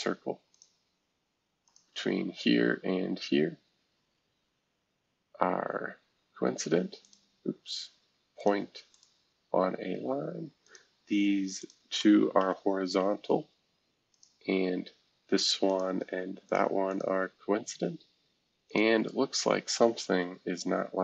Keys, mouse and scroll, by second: 0.5 click, 1.6 shift+click, 6.2 c, 7.0 click, 8.3 click, 8.9 click, 10.6 click, 11.6 shift+click, 12.1-12.9 typing, 15.7 shift+click, 16.5 click, 16.9 click, 17.6-18.1 scroll down 2, 18.1-18.6 scroll down 1, 18.6-20.1 drag, 20.1 Delete.